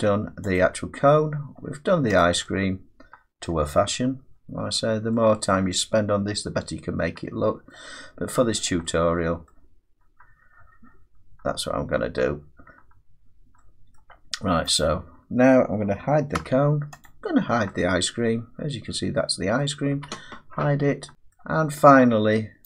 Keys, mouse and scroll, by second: 0.6 click, 1.0-2.2 scroll down 4, 2.2 click, 3.5 middle click, 3.8-5.1 scroll down 5, 4.7-5.5 scroll up 4, 5.5 middle click, 7.7 middle click, 8.1-9.1 scroll down 6, 9.5 middle click, 14.0 middle click, 14.8 click, 16.4 h, 17.1 click, 19.6 middle click, 19.9 h, 20.7-21.1 scroll down 3, 21.4 middle click.